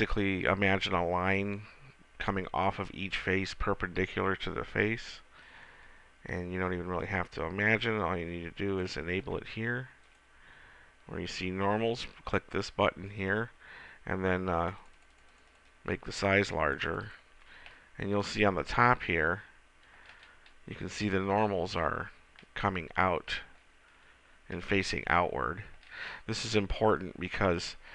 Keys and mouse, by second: 22.2 middle click, 22.4 middle click, 23.0 middle click, 23.5-27.9 middle drag.